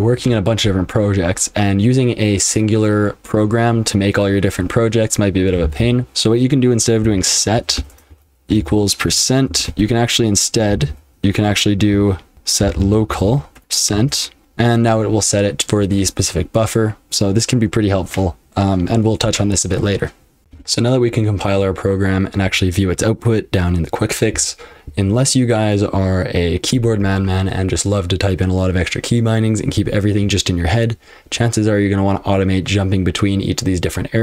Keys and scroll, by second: 5.6 typing, 7.0-9.5 typing, 10.7 ctrl+a, 10.9 ctrl+f, 11.7-14.4 typing, 20.4 F12.